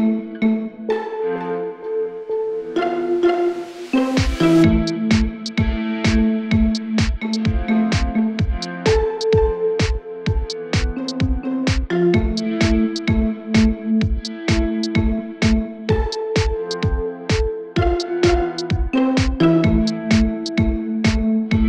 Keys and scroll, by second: 3.1 Return, 4.3 typing, 17.1-17.8 typing.